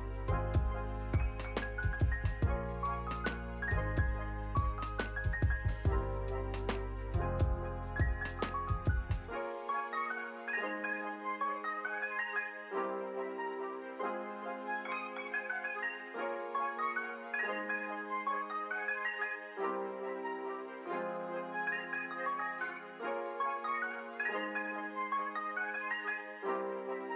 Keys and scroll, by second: 2.0 space, 4.7 space, 5.3 ctrl+s, 11.6 p, 19.4 ctrl+s, 21.2 v.